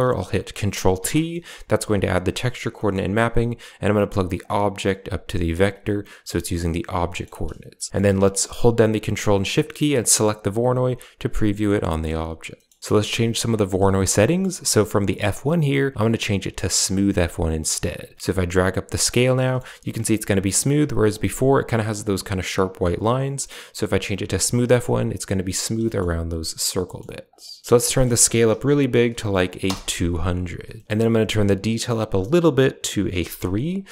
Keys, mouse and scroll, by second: 0.8 ctrl+t, 1.2-1.6 middle drag, 1.6 a, 1.9 click, 3.7 click, 4.3-5.0 drag, 5.4 click, 6.9 middle drag, 7.8 middle click, 10.1 ctrl+shift+click, 10.1 typing, 11.5 middle click, 11.7-12.1 middle drag, 12.4 middle click, 12.8 middle click, 14.1 middle click, 15.0-16.9 drag, 18.0 click, 19.3 shift+middle drag, 20.3-21.0 drag, 23.0-24.2 drag, 26.7 middle drag, 27.2 click, 27.8 click, 29.0 0, 30.6 middle click, 32.2-33.3 drag.